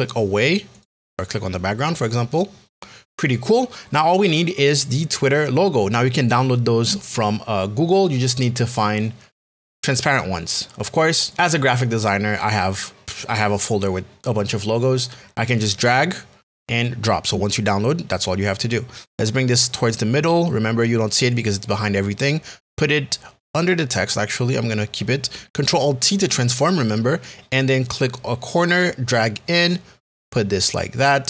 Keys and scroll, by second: 26.7 alt+t.